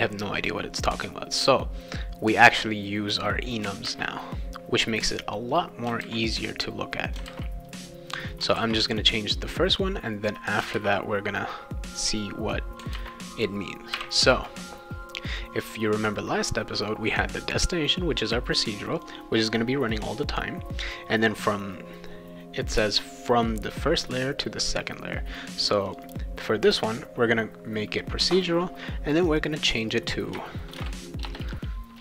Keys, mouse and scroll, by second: 2.3-3.6 drag, 3.8 ctrl+c, 5.5 click, 6.0 ctrl+v, 6.8 click, 7.3 ctrl+v, 7.3 ctrl+scroll down 1, 8.6 ctrl+z, 10.3 ctrl+click, 10.7 ctrl+v, 12.0 click, 12.9 ctrl+v, 13.9 ,, 15.3 click, 19.0 click, 25.8 click, 26.0 click, 29.1 click, 29.3 click, 29.8 click, 30.7 shift+i, 31.3 BackSpace.